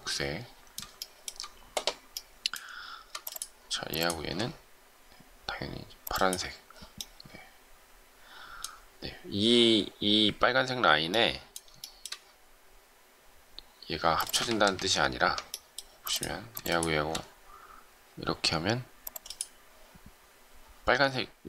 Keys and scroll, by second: 14.4 ctrl+z.